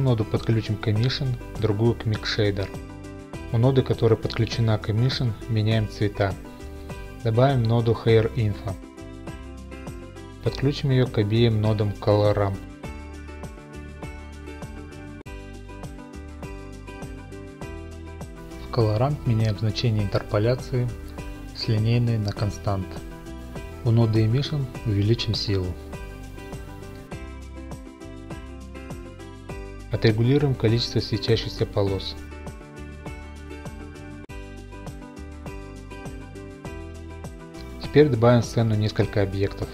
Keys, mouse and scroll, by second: 0.0 click, 0.4 click, 0.9 click, 2.6 scroll, 3.4 click, 3.7 click, 4.3 click, 5.7 click, 6.3 click, 7.4-8.1 scroll, 8.1-9.0 typing, 8.3 click, 9.6 click, 14.3 click, 15.0 click, 18.3 click, 18.9-19.5 scroll, 19.3 click, 20.0 click, 22.3 click, 23.1-23.7 scroll, 23.7 click, 23.9 scroll, 25.1 scroll, 25.1 typing, 25.8-27.1 Return, 26.3 typing, 29.6-30.5 middle drag, 30.7 click, 31.4-33.3 middle drag, 33.3-34.1 drag, 36.7 click, 37.3 scroll, 38.0 click, 39.5-39.7 scroll.